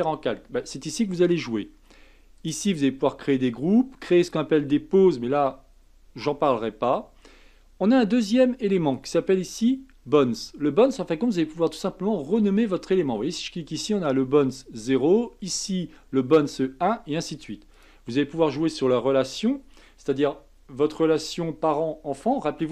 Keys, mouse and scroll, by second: 2.4 click, 4.2 click, 4.7-7.8 scroll down 2, 8.9 click, 13.7 click, 15.5 click, 17.7 click, 19.1-20.1 scroll down 2.